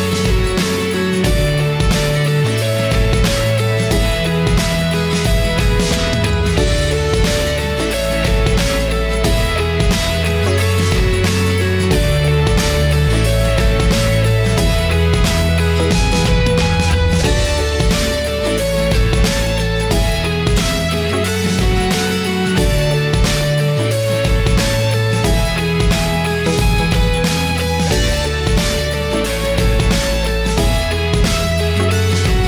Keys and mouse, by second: 0.5-1.1 middle drag, 1.7-2.8 middle drag, 3.5-5.4 middle drag, 6.1 middle click, 8.2 middle click, 9.5 click, 9.7 middle click, 10.3 right click, 11.5 middle click, 14.2-17.0 middle drag, 17.6-19.6 drag, 19.6-19.9 middle drag, 20.7-22.6 drag, 23.4 middle click, 24.4-26.4 middle drag, 27.3-28.7 shift+middle drag, 31.7-32.4 shift+middle drag.